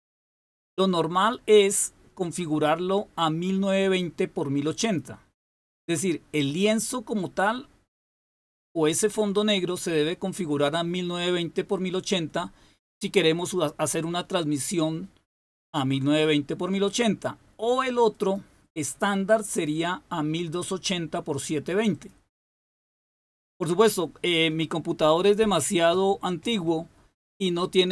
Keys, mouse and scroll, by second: 1.1 click, 4.7 click, 18.1 click, 21.9 click.